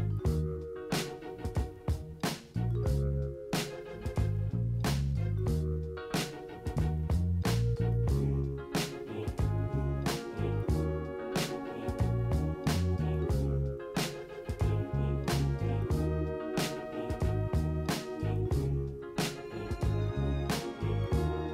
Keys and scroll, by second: 1.8 ctrl+z.